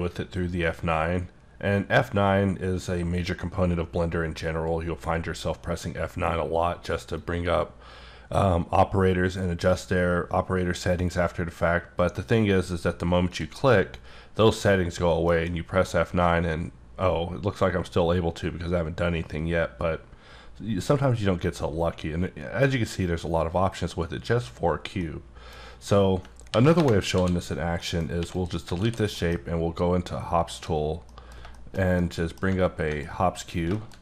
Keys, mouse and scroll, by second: 7.1 click, 13.3 click, 15.3 F9, 25.0 middle click, 26.5 ctrl+n, 26.7 ctrl+Return, 27.1 d, 27.8 middle click, 28.2 x, 28.3 click, 28.8 alt+w, 29.2 middle click, 30.5 click, 31.1 middle click, 33.0 middle click, 33.7 shift+middle click.